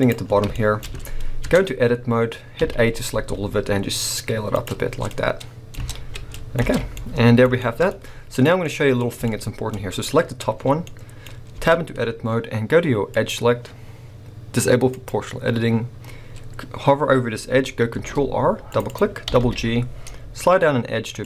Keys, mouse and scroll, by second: 0.0 click, 0.3 scroll up 1, 0.5 shift+middle click, 0.8-1.3 scroll up 1, 1.4 Tab, 2.6 a, 3.1 s, 4.6 click, 4.8 scroll down 1, 5.1 middle click, 5.8 Tab, 5.8-8.3 middle drag, 6.1 scroll down 1, 6.6 alt+a, 7.9 scroll up 1, 8.3 click, 8.6-11.6 middle drag, 9.0 scroll up 2, 11.6 Tab, 11.8-13.1 scroll up 2, 13.1-15.0 drag, 17.9 ctrl+r, 18.9 click, 19.2 g.